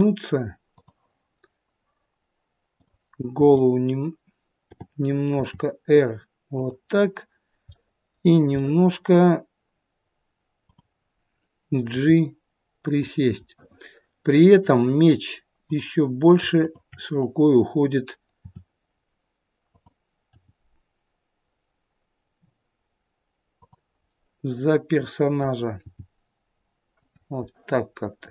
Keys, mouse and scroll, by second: 2.6 click, 3.2 t, 4.5 t, 5.2 r, 7.7 middle click, 8.5 middle click, 10.6 click, 11.8 g, 13.4 middle click, 15.6 click, 16.5 shift+click, 18.4 r, 20.2 g, 24.1 middle click, 25.8 g, 27.4 middle click.